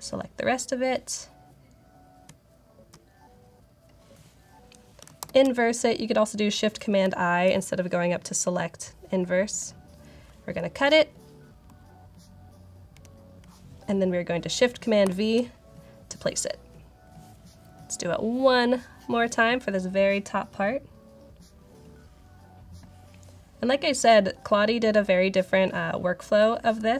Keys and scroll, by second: 2.1-2.7 typing, 5.1 shift+super+i, 12.8 super+x, 14.9 shift+super+v.